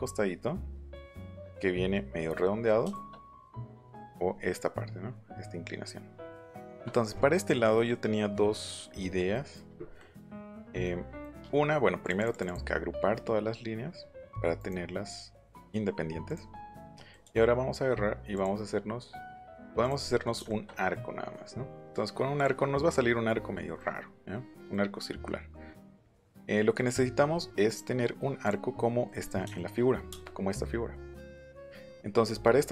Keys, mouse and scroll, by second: 2.3 middle click, 2.8 shift+middle click, 3.5 middle click, 4.0 middle click, 4.3 middle click, 6.3 middle click, 6.6 shift+middle click, 6.9 middle click, 8.3 middle click, 8.6 middle click, 9.0 middle click, 9.3 middle click, 9.7 middle click, 9.9 middle click, 10.5 shift+middle click, 11.2 middle click, 12.0 click, 12.2 click, 14.5 right click, 15.6 click, 15.9 middle click, 16.2 click, 16.5 middle click, 16.9 click, 18.3 click, 19.8 click, 20.0 middle click, 22.3 middle click, 25.9 ctrl+z, 26.4 shift+middle click, 27.6 right click, 28.8 middle click, 30.1 space, 32.6 middle click.